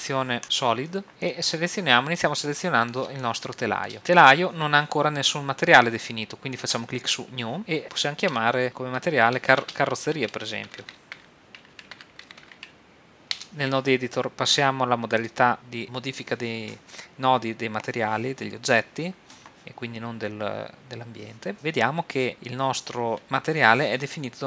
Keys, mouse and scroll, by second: 0.0 shift+z, 0.4 click, 1.4-3.4 right drag, 2.3-3.4 drag, 2.3-4.0 middle drag, 7.2 click, 10.9 r, 11.8 z, 15.2 click.